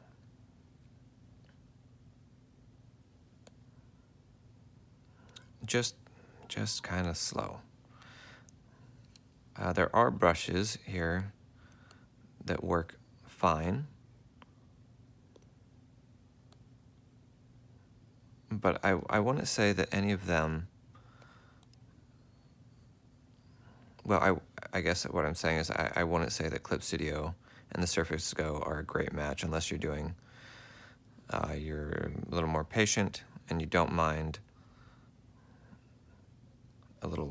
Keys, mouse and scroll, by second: 0.9 ctrl+alt+click, 9.0 F4, 14.5 F4, 16.2 F4, 25.2 ctrl+z, 25.8 ctrl+z, 26.2 ctrl+z, 26.4 ctrl+z, 26.6 ctrl+z, 26.9 ctrl+z, 27.6 ctrl+z, 28.1 ctrl+z, 28.5 ctrl+z, 29.0 ctrl+z, 34.9 ctrl+alt+click, 36.6 F4.